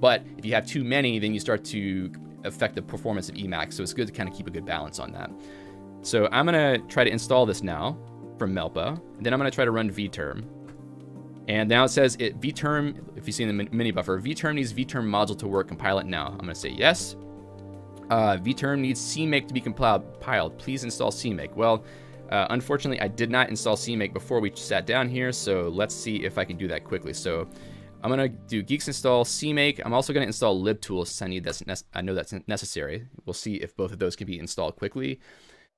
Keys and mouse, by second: 1.3-2.0 typing, 4.5-5.9 typing, 7.3-12.6 typing, 15.5-16.9 typing, 16.9 alt+x, 16.9 Return, 18.1-21.6 typing.